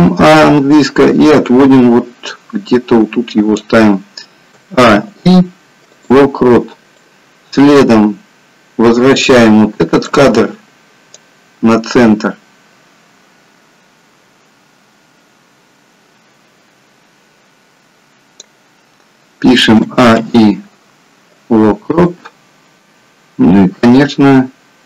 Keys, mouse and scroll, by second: 4.6 a, 5.0 i, 7.3 click, 11.2 click, 19.7 a, 20.1 i, 24.1 click.